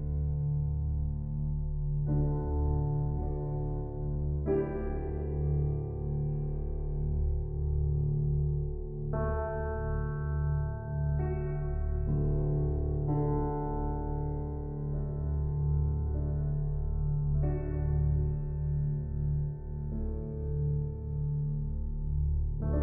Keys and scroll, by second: 7.5 ctrl+d, 16.3 ctrl+c, 18.4 ctrl+v.